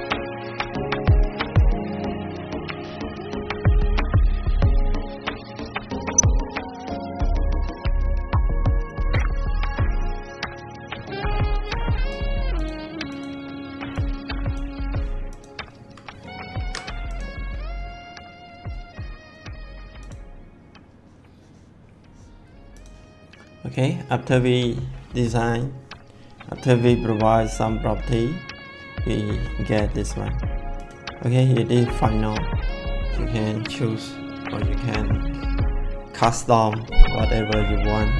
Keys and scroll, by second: 16.4 ctrl+s.